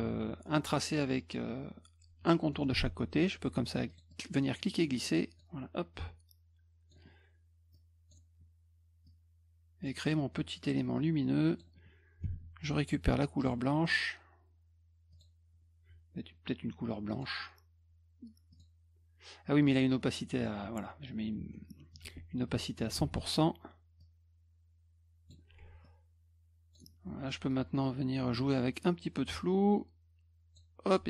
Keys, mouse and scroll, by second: 2.5 middle click, 3.9 click, 4.1-5.4 drag, 6.0 click, 7.7 click, 9.1 click, 10.9 click, 12.2 d, 13.4 click, 15.1 click, 17.1 click, 18.5 click, 19.7 right click, 20.4 click, 21.5 F1, 23.0 ctrl+a, 24.0-25.3 drag, 25.8 click, 28.8-30.5 drag.